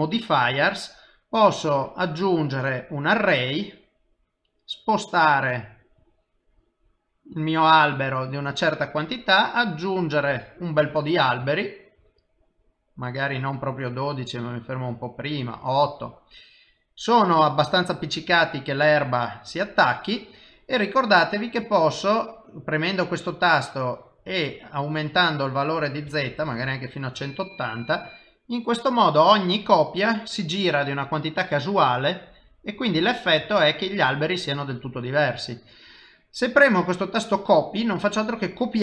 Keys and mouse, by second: 1.7 click, 4.3 click, 10.6 middle click, 11.6 shift+middle click, 12.1 middle click, 13.4 click, 16.6 middle click, 18.4 click, 21.7 click, 23.2 click, 25.6 click, 27.5 middle click, 30.0 middle click, 33.5 shift+middle click, 34.0 middle click, 38.7 click.